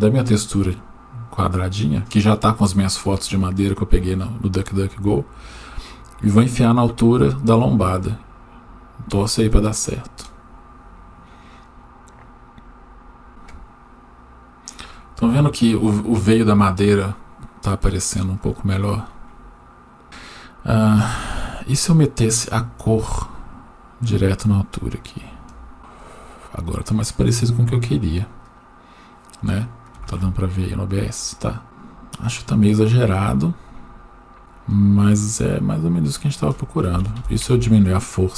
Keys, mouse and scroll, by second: 5.6-10.1 drag, 20.0 click, 23.0-25.3 drag, 34.4-35.3 drag, 36.2-37.5 drag.